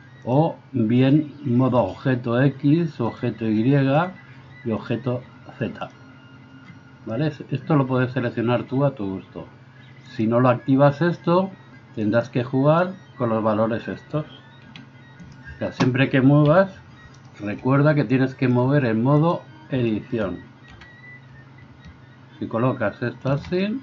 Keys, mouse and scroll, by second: 10.3-12.1 middle drag, 12.1 right click, 12.3-18.6 middle drag, 14.6 r, 16.4 KP_3, 18.6-23.4 drag, 20.7 r, 23.4-23.8 ctrl+middle drag.